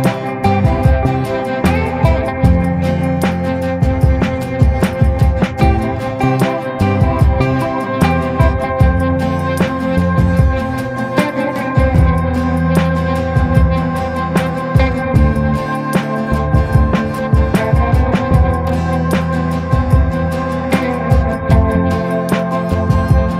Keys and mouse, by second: 1.5 middle click, 1.9 shift+middle click, 2.5 shift+middle click, 2.9 middle click, 3.2 shift+middle click, 3.6 middle click, 4.4 shift+middle click, 4.9 shift+click, 6.0 b, 6.5 b, 7.4 click, 8.4-11.4 right drag, 12.5 middle click, 14.0 middle click, 14.5 middle click, 15.2 b, 16.0 b, 16.6 b, 17.3 middle click, 18.2-19.8 drag, 20.5 middle click, 20.9 middle click, 21.9 b, 22.6 b, 23.2 b.